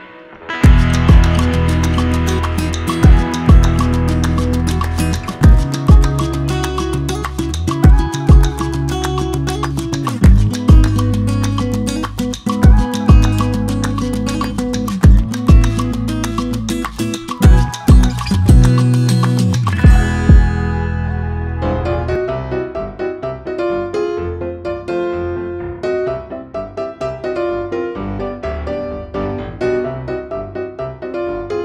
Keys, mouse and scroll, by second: 0.7 shift+click, 2.1 shift+click, 3.4-5.6 drag, 10.7 Up, 11.0-31.6 drag, 26.9 s.